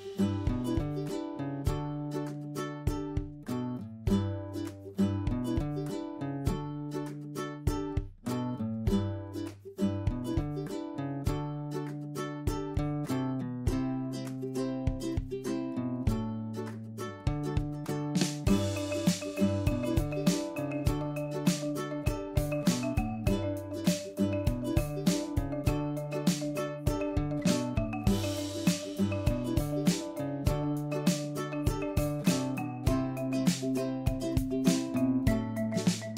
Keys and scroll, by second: 5.2 ctrl+Right, 12.9 ctrl+Left, 20.9 ctrl+Left, 30.3 ctrl+Left.